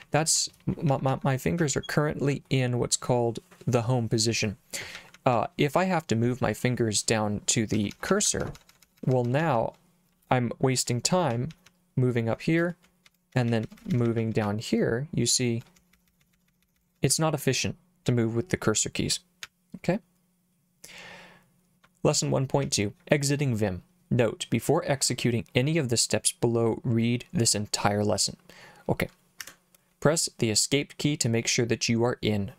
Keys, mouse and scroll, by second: 0.0-2.1 typing, 5.0 j, 5.1 j, 5.3 j, 7.8 Up, 7.9 Up, 8.1 Up, 8.2 Up, 8.4 Up, 8.6 Up, 8.7 Up, 8.9 Up, 9.0 Up, 9.1 Up, 9.3 Up, 9.4 Up, 9.6 Up, 11.3 j, 11.5 j, 11.7 j, 13.1 Down, 13.1 Right, 13.3 Down, 13.5 Down, 13.6 Down, 13.8 Down, 13.9 Down, 14.0 Down, 14.2 Down, 14.4 Up, 15.8 Down, 15.9 Down, 16.1 Down, 16.2 Down, 16.3 Down, 16.5 Down, 16.6 Down, 16.8 Down, 16.9 Down, 17.1 Up, 19.4 j, 22.6 j, 29.4 Escape.